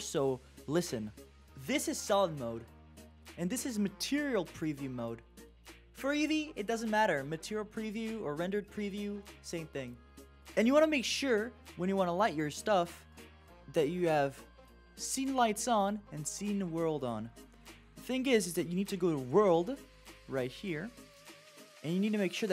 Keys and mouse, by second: 3.4 click, 13.6-18.3 drag.